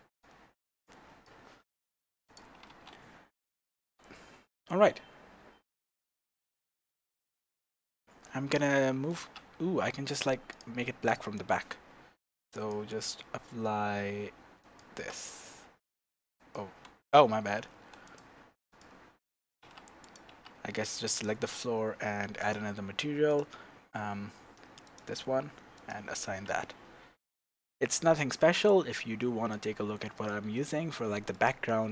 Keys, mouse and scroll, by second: 2.3 click, 2.7 Tab, 10.5 click, 11.1 click, 12.5 click, 12.9-17.1 drag, 18.0-19.6 drag, 19.6 Tab, 20.0 click, 20.3 Tab, 20.7 click, 22.3 click, 22.3-23.8 middle drag, 23.3-26.1 drag, 26.4 Tab, 28.7-31.9 drag.